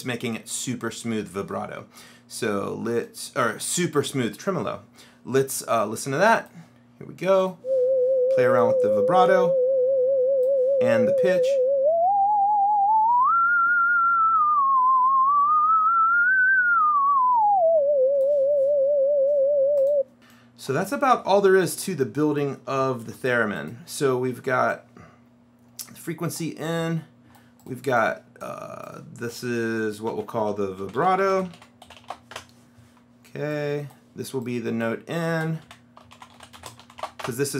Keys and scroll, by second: 23.1 shift+w, 30.1-32.6 typing, 35.5-37.5 typing.